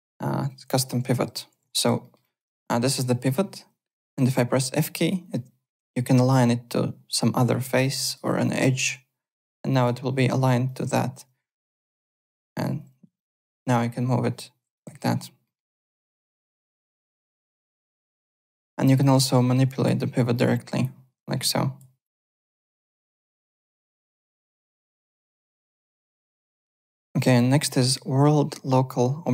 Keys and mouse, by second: 0.6 alt+Tab, 1.6 w, 2.0 alt+middle click, 2.2 alt+click, 4.3 f, 8.0 click, 8.7 click, 9.7 click, 10.6 click, 11.9 f, 12.2 alt+click, 13.1 alt+click, 13.7 click, 14.9 ctrl+z, 15.4 middle click, 16.0 click, 16.4 ctrl+z, 16.6 alt+click, 17.1 f, 17.6 click, 18.6 alt+Tab, 19.0 alt+click, 19.3 alt+middle click, 19.8 f, 20.4 click, 21.2 click, 22.0 click, 23.0 click, 24.1 f, 25.0 f, 25.3 click.